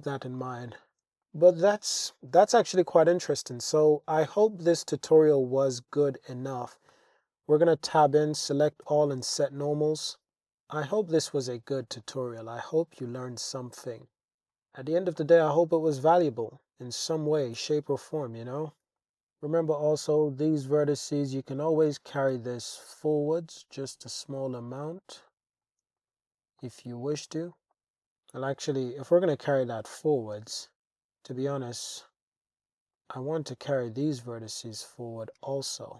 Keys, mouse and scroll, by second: 0.1 g, 0.4 z, 0.9 click, 1.2 click, 1.4-2.0 middle drag, 3.2-4.2 drag, 5.2-5.6 middle drag, 6.1 click, 6.6 Tab, 8.0 a, 8.9 shift+n, 9.4 Tab, 10.0 click, 10.4-11.1 drag, 12.0 click, 12.7 click, 13.2 click, 14.4 click, 15.2-17.1 drag, 18.3 shift+click, 19.0 Tab, 19.5 alt+click, 20.8 alt+shift+click, 22.1 g, 22.3 y, 23.7 click, 24.1-25.3 drag, 26.0 alt+click, 26.6 alt+click, 27.2 alt+click, 27.7 alt+click, 27.8 super+z, 28.1 super+z, 28.5 super+z, 28.9 super+z, 29.5 super+z, 29.9 super+z, 32.0 shift+click, 32.9 shift+click, 33.8 shift+click, 34.5 shift+click.